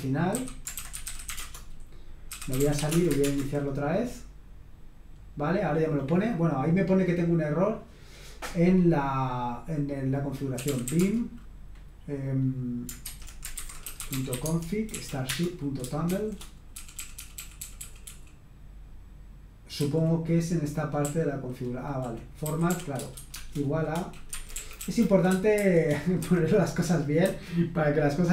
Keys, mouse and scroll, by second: 0.1-3.2 typing, 10.3-11.3 typing, 13.0-18.2 typing, 14.9 Right, 15.2 Return, 19.7 k, 21.2-26.9 typing, 24.3 Escape, 26.2 Escape.